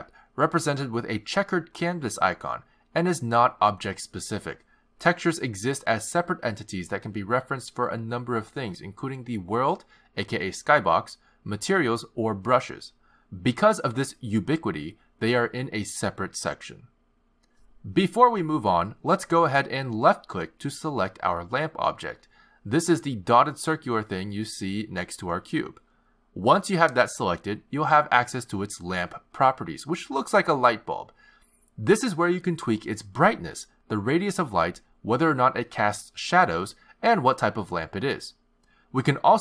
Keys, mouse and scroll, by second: 14.9 click, 18.2 click, 21.7 click, 31.3 click, 33.3 click, 34.5 click, 36.1 click, 36.4 click, 37.1 click, 37.5 click, 37.9 click, 38.5 click.